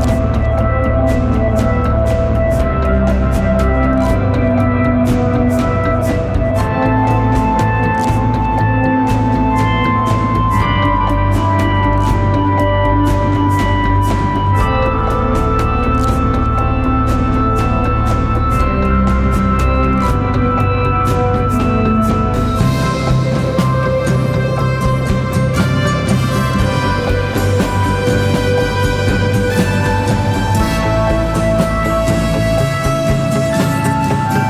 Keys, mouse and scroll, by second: 2.7 double click, 6.5-9.3 scroll up 1, 15.3-16.3 typing, 19.9 typing, 23.8-24.7 scroll up 1, 32.4 typing.